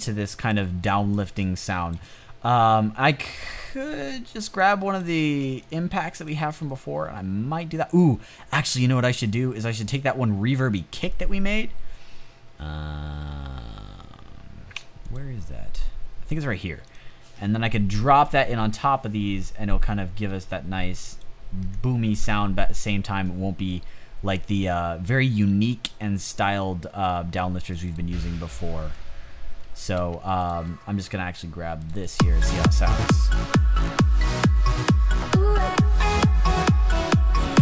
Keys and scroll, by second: 29.8 space.